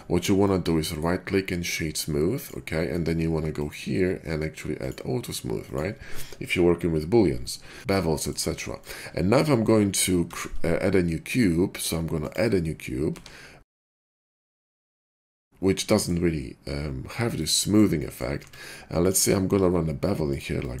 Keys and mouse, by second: 1.4-10.2 drag, 3.6 middle click, 3.6 right click, 4.8-5.7 middle drag, 4.8-5.7 right drag, 10.2 shift+a, 13.1 drag, 13.1 f, 13.3-20.8 drag, 14.2 g, 18.3 Tab, 18.9 middle click, 18.9 right click, 19.5 ctrl+b.